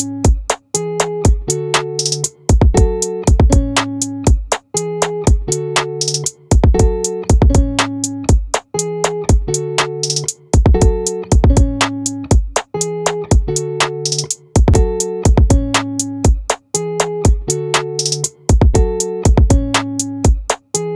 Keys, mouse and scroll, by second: 6.0-7.4 drag, 7.4 ctrl+r, 11.2-12.4 drag, 12.4 ctrl+r, 12.5 click.